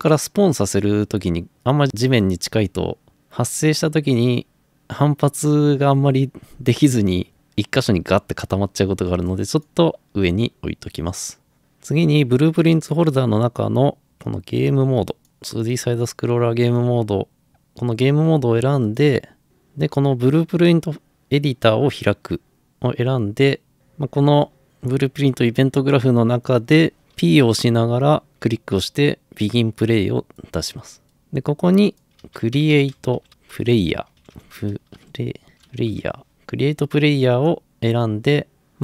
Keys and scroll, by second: 27.2-28.0 typing, 29.8 typing, 32.0-36.0 typing.